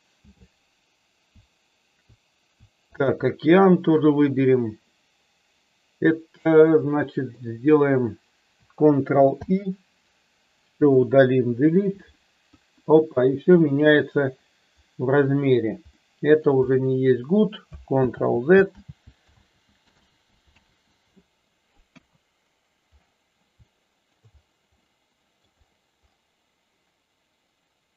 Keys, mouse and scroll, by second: 3.0 shift+click, 6.8 middle click, 9.3 ctrl+i, 10.7 Delete, 12.5 KP_1, 15.9-16.3 middle drag, 18.2 ctrl+z, 19.0 ctrl+z, 19.3 ctrl+z, 20.1 ctrl+z, 20.5 ctrl+z, 21.9 KP_1, 23.7-24.1 shift+middle drag, 24.7-25.3 middle drag.